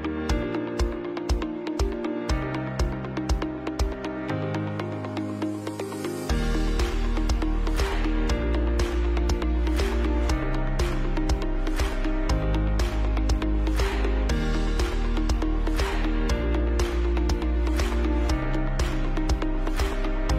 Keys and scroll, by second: 2.1 ctrl+shift+], 5.9 Left, 6.5 Right, 7.3 Left, 8.2 Right, 11.1 ctrl+shift+3, 12.3 ctrl+shift+c, 12.5 b, 12.9 Down, 13.1 Right, 15.1 Down, 15.2 Down, 15.5 Down, 18.6 Down, 18.7 Down, 18.9 Down.